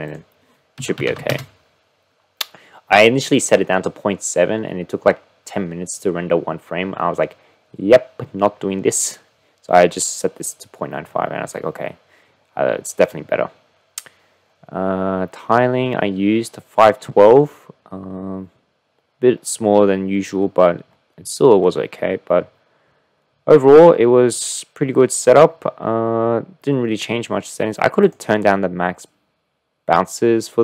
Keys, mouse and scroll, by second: 28.1-30.6 drag.